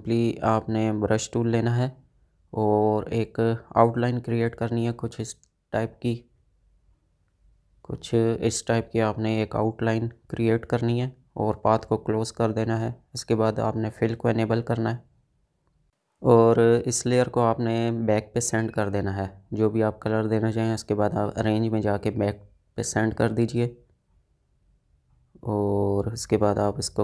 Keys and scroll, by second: 5.8 ctrl+z.